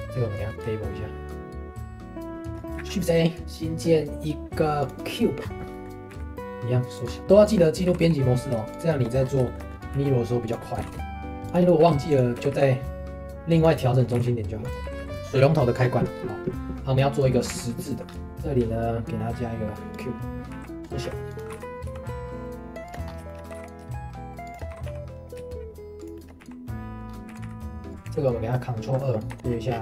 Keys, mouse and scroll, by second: 2.5 shift+middle click, 2.8 shift+a, 5.4-5.7 scroll down 1, 5.7 middle click, 6.1 s, 7.1 scroll up 3, 7.2 g, 7.6 middle click, 7.8 g, 8.9 shift+middle click, 9.2 scroll up 1, 9.4 shift+middle click, 9.9 s, 10.6 middle click, 10.8 g, 12.3 s, 14.1 g, 15.2 middle click, 17.5 ctrl+s, 18.1 scroll down 1, 18.3 shift+a, 20.8 scroll up 1, 21.0 s, 22.5 g, 23.0 scroll up 2, 23.2 shift+middle click, 23.5 g, 24.7 g, 26.1 shift+middle click, 26.4 s, 26.9 middle click, 27.0 scroll up 2, 27.3 s, 27.9 click, 28.0 ctrl+2, 29.0 middle click, 29.3 Tab, 29.4 ctrl+b.